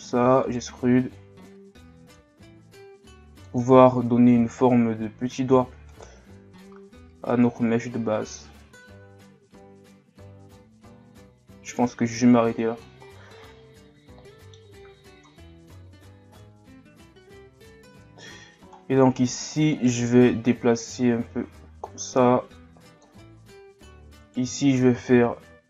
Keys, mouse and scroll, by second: 1.1-2.5 drag, 2.5 s, 3.8-4.8 scroll down 1, 4.8-5.6 scroll down 1, 5.6 e, 6.6-9.7 drag, 13.4-15.3 middle drag, 15.3 KP_3, 16.2-17.8 scroll up 2, 17.8-18.8 scroll up 1, 18.8-19.2 scroll down 1, 19.2-19.7 scroll up 1, 19.7 alt+right click, 20.5-23.5 drag, 24.2 alt+right click.